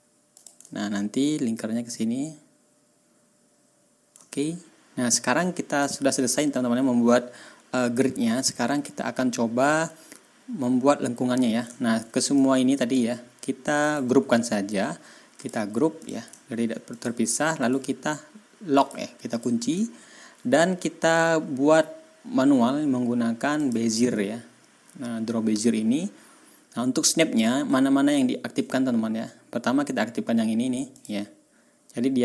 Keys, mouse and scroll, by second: 0.3 click, 0.6 ctrl+scroll down 2, 4.2 ctrl+scroll down 2, 5.7 ctrl+click, 6.4 ctrl+scroll up 2, 8.4 ctrl+scroll up 2, 9.3 ctrl+scroll down 2, 11.6 ctrl+scroll down 2, 12.3 ctrl+click, 13.7 right click, 15.3 click, 15.9 click, 16.3 ctrl+scroll up 2, 16.8 ctrl+click, 17.5 right click, 18.7 click, 19.3 click, 19.9 ctrl+scroll up 2, 23.5 click, 30.9 middle click.